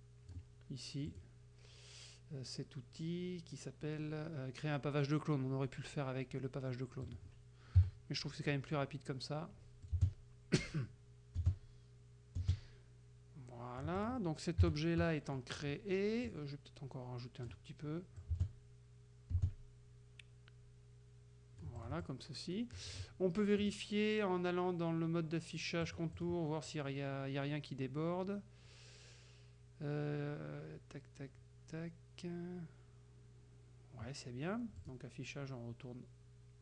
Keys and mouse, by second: 1.2 click, 7.1 click, 7.8 KP_Subtract, 8.5 click, 9.9-14.3 drag, 10.0 space, 11.5 space, 12.5 space, 14.7 KP_Subtract, 15.4 click, 16.3-17.7 drag, 18.2-23.2 drag, 18.4 space, 19.4 space, 23.7 click, 25.9 click, 34.8 click.